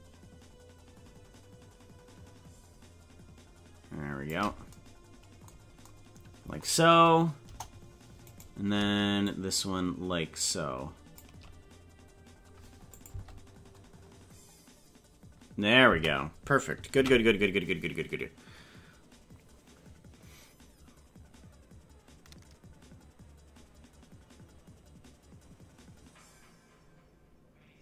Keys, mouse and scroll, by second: 7.4 KP_0, 8.4 right click, 9.2-11.2 shift+drag, 12.9 click, 13.1 space, 16.0 space, 17.0 ctrl+s.